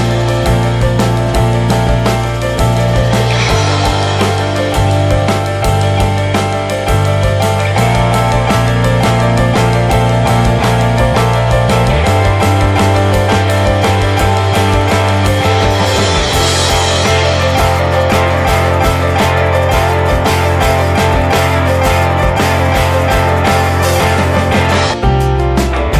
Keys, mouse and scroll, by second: 1.3 scroll down 4, 2.2 click, 5.6 scroll down 3, 7.1 shift+right click, 7.9 ctrl+shift+right click, 8.4 middle click, 9.0-9.8 drag, 9.9-13.4 drag, 14.2-16.5 drag, 17.2-18.7 drag, 18.7-19.1 scroll up 3, 19.1-21.4 drag, 22.1 click, 24.6 scroll up 7, 25.4-25.7 scroll up 1, 25.7 click.